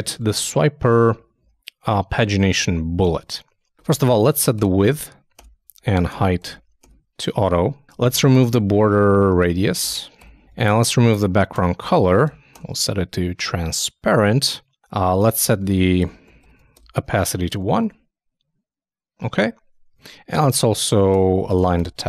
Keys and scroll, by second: 17.5 super+i, 17.6 super+s, 17.8 super+Tab, 19.9 super+Tab, 20.7 super+Right.